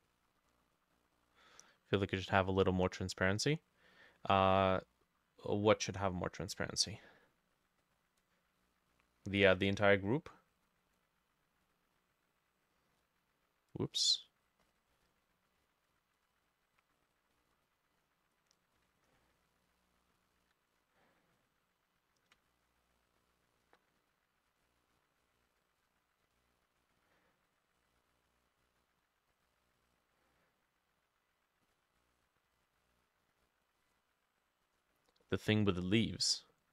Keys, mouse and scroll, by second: 0.1 middle click, 4.5 middle click, 14.1-15.3 scroll up 6, 16.8-17.2 scroll down 1, 17.2 scroll up 1, 17.4 middle click, 22.5 ctrl+click, 26.3 double click, 35.3 middle click, 36.1 middle click.